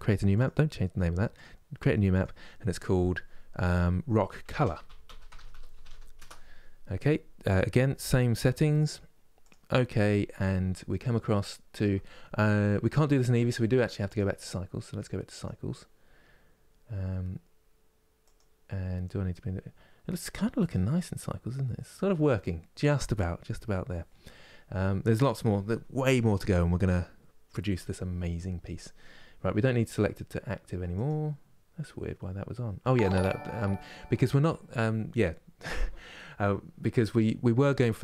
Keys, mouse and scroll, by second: 0.1-5.8 drag, 15.1-16.9 drag, 18.0-38.0 drag.